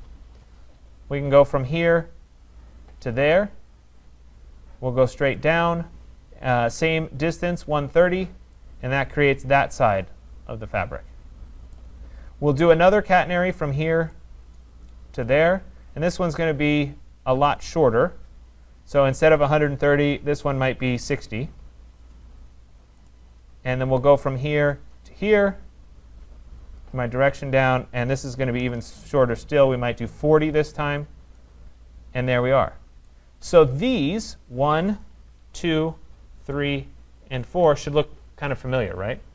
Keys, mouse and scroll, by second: 1.8 click, 3.2 click, 5.5 click, 7.6 Return, 11.8 right click, 12.6 right click, 13.5 click, 14.6 right click, 15.4 click, 17.7 click, 20.8-21.6 typing, 23.1 right click, 24.3 click, 25.2 click, 27.0 click, 28.3-29.5 typing, 30.3 Return, 31.4 click, 33.1 right click, 33.4 scroll, 34.4 click, 34.8 middle click, 35.6 shift+right click, 36.6 shift+click, 37.6 click.